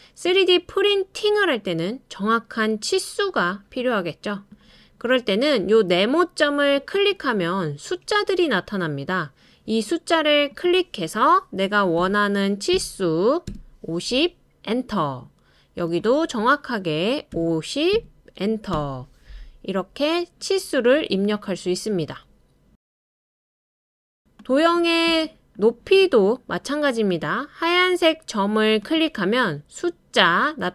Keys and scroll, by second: 12.5-13.2 typing, 13.5 Return, 17.3-18.7 typing.